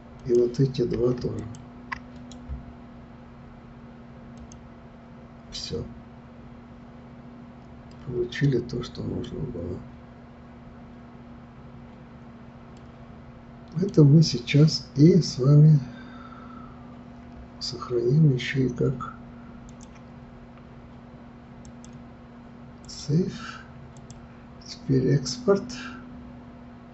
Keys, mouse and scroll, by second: 0.2 click, 1.4 shift+click, 2.1-7.9 right drag, 7.9-9.4 middle drag, 9.4-10.3 scroll down 3, 10.3 scroll up 2, 12.8-15.8 middle drag, 15.9-16.5 scroll up 1, 16.5-17.6 scroll up 1, 19.7-26.9 drag.